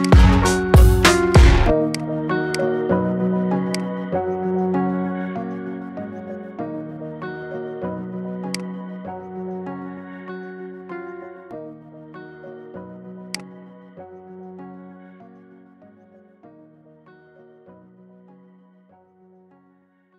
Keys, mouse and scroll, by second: 0.4-0.9 scroll down 4, 1.1-1.8 drag, 2.4 click, 2.7 middle click, 3.5 click, 4.2-5.2 middle drag, 5.2 KP_7, 7.2 shift+a, 9.3 s, 14.7-15.1 scroll down 3, 15.1-19.0 middle drag, 19.0 KP_3.